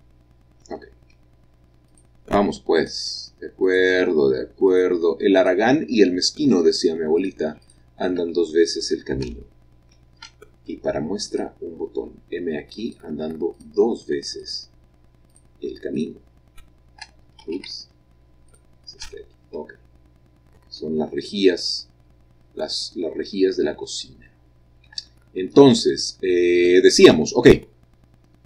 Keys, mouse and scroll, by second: 1.1-4.6 shift+middle drag, 1.8 shift+click, 2.7 shift+click, 3.6 shift+click, 4.6-7.3 shift+drag, 7.6 shift+click, 10.2-11.2 shift+middle drag, 11.2 shift+click, 12.8 shift+click, 13.5 shift+click, 14.4 shift+click, 15.2 shift+click, 15.3 shift+click, 15.9 shift+click, 17.4 ctrl+z, 18.5 shift+click, 19.7 middle click, 19.9-21.1 scroll down 1, 20.0 middle click, 20.3 middle click, 20.8-21.9 middle drag, 22.3 middle click, 23.2-24.2 scroll up 1, 23.8 shift+middle click, 25.2 shift+middle click, 25.2-27.9 shift+scroll down 1, 27.9 scroll down 1.